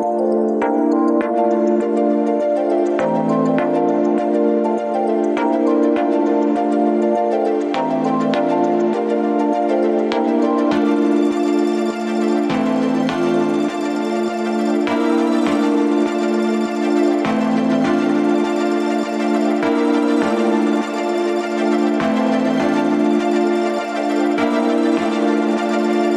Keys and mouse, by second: 0.1 3, 0.4 click, 1.0 shift+click, 2.3-2.8 middle drag, 9.2 click, 19.8 Tab, 20.8-21.2 middle drag, 25.4-25.7 shift+middle drag.